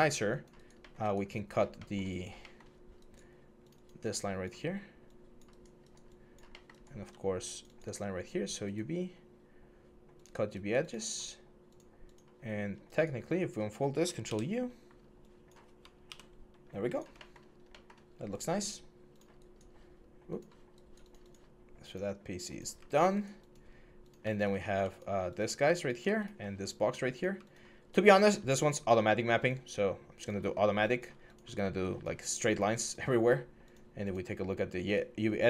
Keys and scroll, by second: 14.0 ctrl+u, 15.8 ctrl+u.